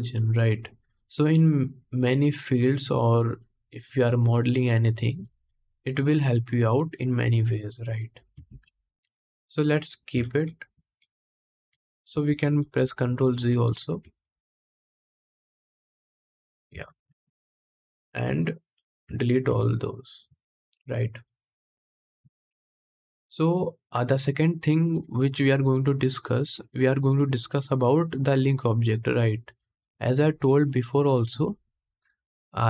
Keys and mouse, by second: 8.1 ctrl+Tab, 9.9 ctrl+z, 10.1 ctrl+z, 10.4 ctrl+z, 10.7 ctrl+z, 11.0 ctrl+z, 11.4 ctrl+z, 11.8 ctrl+z, 12.1 ctrl+z, 12.5 ctrl+z, 12.5-14.1 ctrl+drag, 12.9 ctrl+z, 13.2 ctrl+z, 13.5 ctrl+z, 13.7 ctrl+z, 13.9 ctrl+z, 14.1 ctrl+z, 14.3 ctrl+z, 14.5 ctrl+z, 14.7 ctrl+z, 14.9 ctrl+z, 15.1 ctrl+z, 15.7 ctrl+z, 16.8 ctrl+Tab, 16.8-18.4 ctrl+drag, 18.4 middle click, 18.9 shift+click, 19.0 shift+middle click, 19.2 x, 20.1 ctrl+s, 22.3-32.6 middle drag.